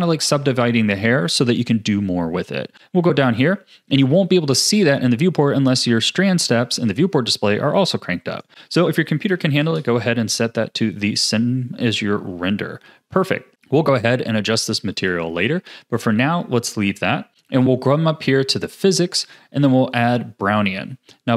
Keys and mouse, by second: 8.5-9.6 drag, 15.1 click, 18.5 click, 20.2-21.3 drag.